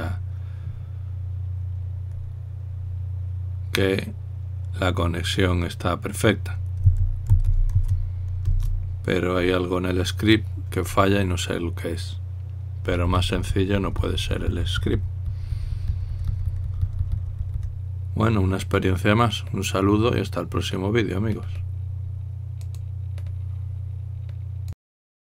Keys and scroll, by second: 7.5-8.9 typing, 9.2 Return.